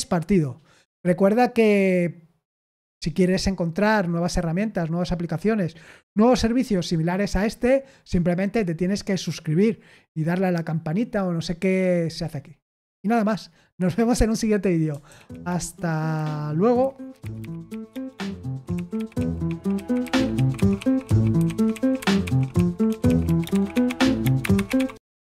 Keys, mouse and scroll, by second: 15.0 super+x, 25.2 click.